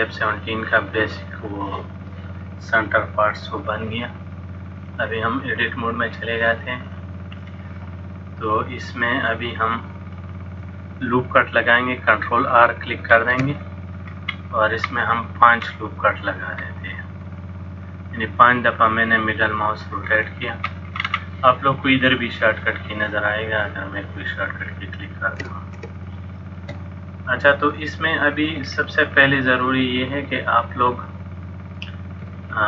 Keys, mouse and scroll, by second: 4.9 click, 6.9 click, 7.5 middle click, 9.6 middle click, 13.2 ctrl+r, 20.1-20.5 scroll down 2, 20.5-21.1 scroll up 2, 21.1-21.7 scroll up 3, 23.7 click, 26.2 shift+middle click, 27.8 middle click, 28.7-29.2 scroll down 1, 29.2-29.7 scroll down 2, 29.7 middle click, 32.4 shift+middle click.